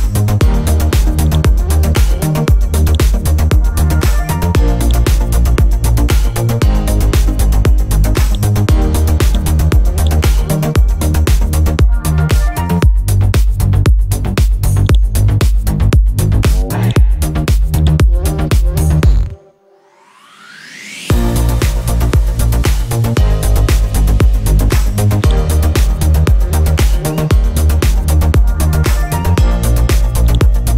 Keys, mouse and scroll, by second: 1.2 click, 1.7-2.3 scroll down 1, 2.8 shift+click, 3.8-4.2 typing, 4.8 click, 5.3-6.6 scroll up 1, 7.3-8.2 scroll down 1, 8.2 click, 10.0 right click, 12.8-14.8 scroll up 1, 14.9-16.8 shift+drag, 19.9-22.6 scroll up 1, 25.2-27.5 drag, 28.4-30.1 scroll down 1, 30.2 shift+click.